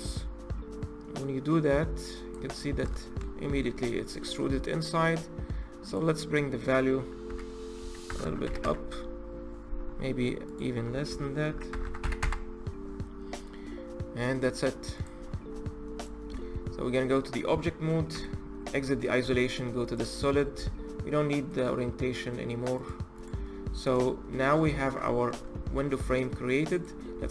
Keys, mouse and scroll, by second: 0.6 click, 2.4-2.8 scroll up 5, 2.8 shift+middle click, 3.6-5.6 scroll up 9, 5.6-8.0 drag, 8.0 KP_0, 10.2-11.6 drag, 11.6 KP_0, 13.7-14.3 scroll down 4, 14.3 middle click, 14.8 click, 15.0-15.8 scroll down 5, 15.8 click, 16.1 Tab, 16.5-17.9 scroll down 3, 17.9 KP_Divide, 19.0 z, 19.6 click, 21.3-23.0 drag, 23.2-23.7 scroll up 3, 23.7-24.5 middle drag, 24.5-24.9 scroll down 1, 24.9-25.7 shift+middle drag, 25.7-26.6 scroll up 3, 26.6 click, 26.9-27.3 scroll up 2.